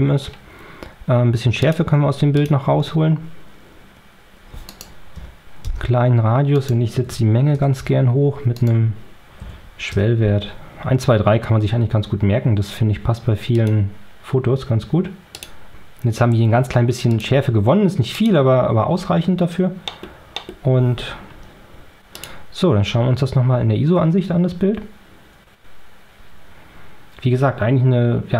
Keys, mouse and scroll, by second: 1.5 click, 2.3 click, 4.6 right click, 5.0 1, 5.6 Return, 6.5 right click, 7.0 2, 7.5 Return, 8.5 right click, 9.3 3, 9.9 Return, 13.5 click, 15.2 click, 17.0 click, 18.0 click, 19.8 middle click, 20.3 middle click, 22.1 click, 22.9 Tab.